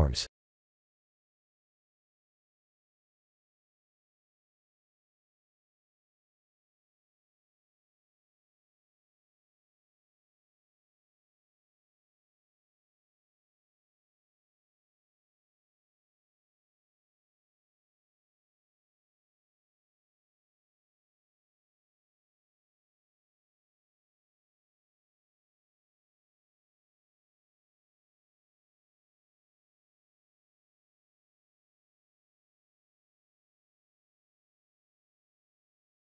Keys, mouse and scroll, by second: 0.8 KP_3, 1.7 KP_1, 3.1 e, 7.6 middle click, 8.3-9.7 scroll down 1, 9.7-10.5 scroll down 1, 10.5 Tab, 10.5 scroll up 1, 11.3 KP_1, 12.3-12.9 scroll up 2, 12.9 g, 18.1 g, 20.0 middle click, 20.2 middle click, 20.3 middle click, 20.4 middle click, 20.8-21.6 scroll down 6, 21.6 middle click, 24.2 middle click, 24.3 middle click, 26.2 middle click, 26.2 KP_1, 27.8 middle click, 28.0 middle click, 28.7 click, 29.9 Tab, 30.4 click, 31.6 p, 32.4 Tab, 33.2 click, 34.5 ctrl+a.